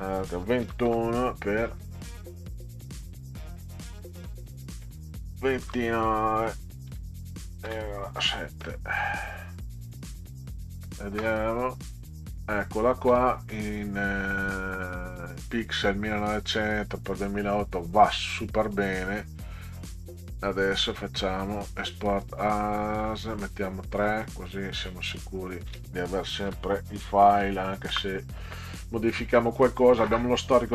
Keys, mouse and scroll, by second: 0.6 2, 1.7 click, 3.6 click, 4.3 click, 6.9 9, 7.7 ,, 8.2 7, 9.7 click, 12.8 ctrl+scroll up 2, 19.1 click, 21.4 click, 23.0 click, 24.0 click, 25.1 click, 26.5 3, 27.3 Delete, 27.9 Return.